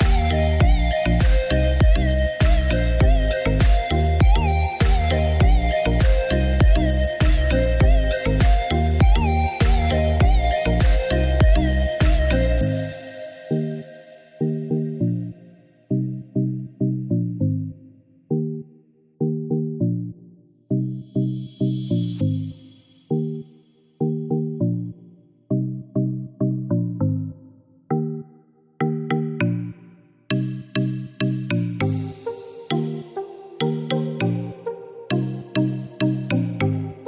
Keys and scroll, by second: 5.4 5, 5.9 Return, 21.5 Escape, 26.8 1, 27.2 Return, 28.9 Escape.